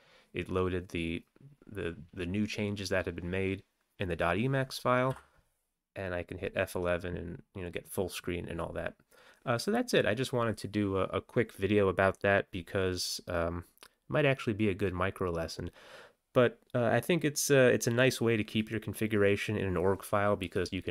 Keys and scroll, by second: 5.2 F11.